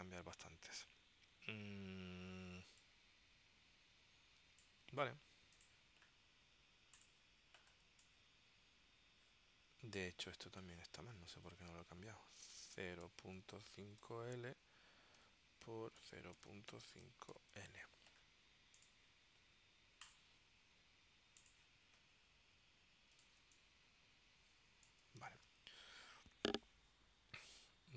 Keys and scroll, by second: 8.0 space, 11.6 super+f, 12.7-14.2 typing, 15.3 Tab, 16.0-17.4 typing, 23.5 space, 25.4 super+s.